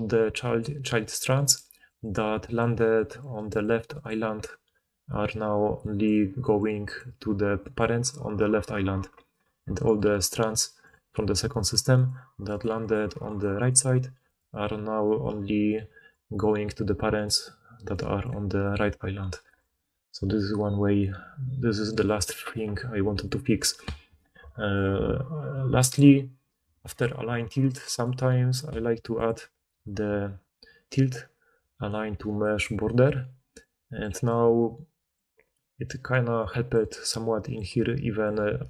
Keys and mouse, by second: 0.0-8.2 typing, 6.0-11.0 drag, 6.0 right click, 8.1-11.0 middle drag, 8.1-11.0 right drag, 9.3-19.4 typing, 23.9-25.9 middle drag, 25.9-29.1 drag, 29.1-34.5 middle drag, 36.4 d, 37.5-38.5 typing, 38.2-38.6 drag, 38.2-38.6 right drag.